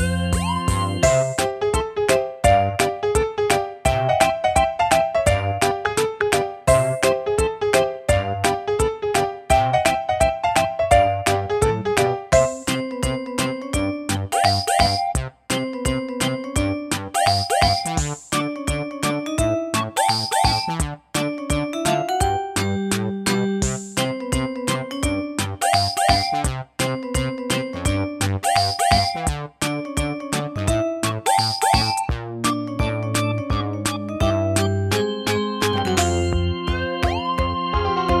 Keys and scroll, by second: 11.2-12.0 typing.